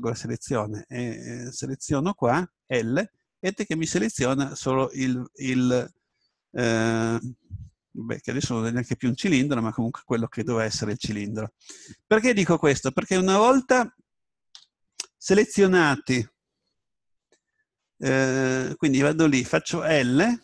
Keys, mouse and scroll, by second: 2.7 l, 3.6-5.9 middle drag, 10.8 middle click, 12.3 scroll up 1, 12.4-14.6 scroll down 1, 14.6 a, 20.0 l.